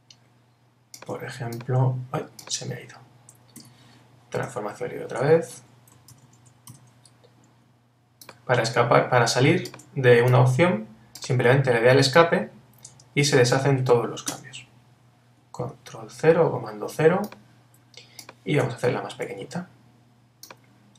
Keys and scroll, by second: 3.6 Escape, 4.7 super+t, 6.1 super+-, 14.3 Return, 15.6 super+0, 18.9 super+t.